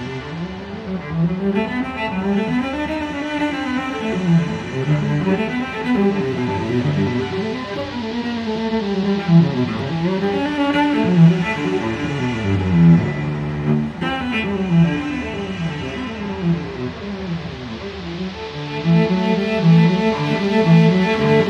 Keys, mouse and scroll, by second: 0.2 click, 1.1 click, 2.1 click, 4.1 click, 5.5 click, 6.5 click, 9.3 click, 11.0 click, 13.4 click, 14.6 click, 15.9 0, 16.6 click, 17.2 1, 18.1 click, 19.0 click, 19.9 1, 20.5 8.